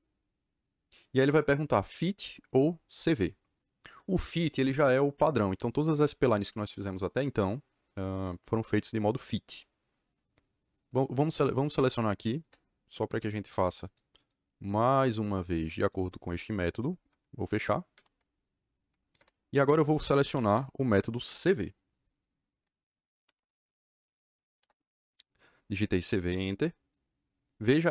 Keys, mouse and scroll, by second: 12.3 KP_Enter, 13.4 click, 13.8 click, 14.1 click, 14.5 click, 14.8 click, 15.0 click, 15.3 click, 15.7 click, 16.3 click, 17.9 c, 19.1 KP_Enter, 20.2 m, 20.4 KP_Enter, 23.0-23.8 typing, 24.5 Return.